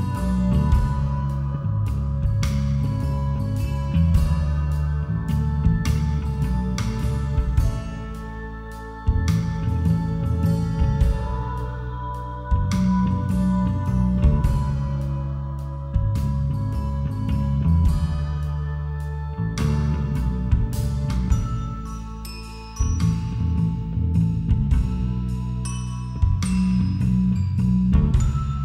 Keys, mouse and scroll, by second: 0.9-4.9 drag, 4.0 ctrl+r, 9.0 z, 11.3 g, 16.4 a, 17.3 b, 19.1 g, 23.8 a, 24.7 b, 26.3 g.